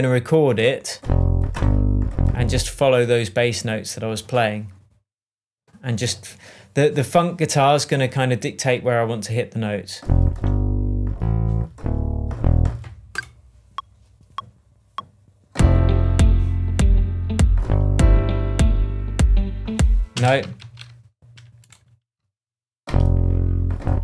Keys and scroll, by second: 20.1 space, 20.5 super+z.